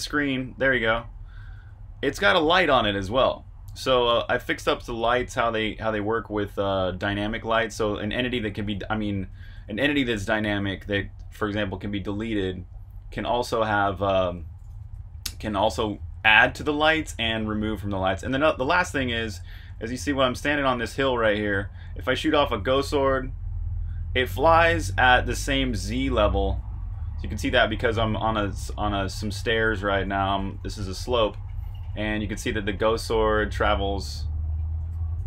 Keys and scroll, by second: 0.6-1.6 typing, 3.7-35.2 typing.